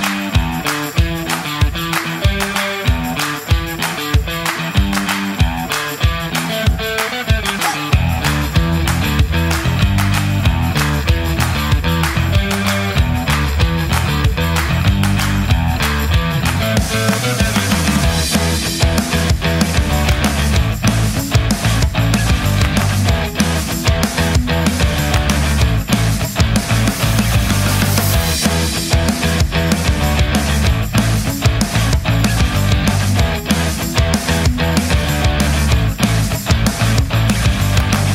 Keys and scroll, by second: 0.0-1.6 typing, 34.8-36.7 typing.